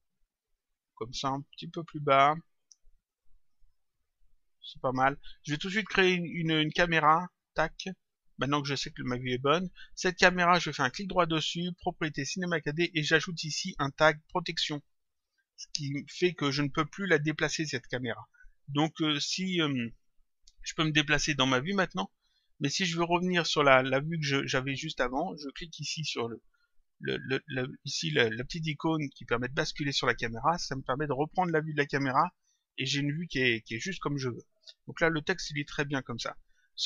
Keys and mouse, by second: 1.8 click, 3.4 click, 7.3 click, 10.6 right click, 15.0 click, 19.8 click, 21.5 click, 22.8 click, 30.0 click, 32.7 click, 36.5 click.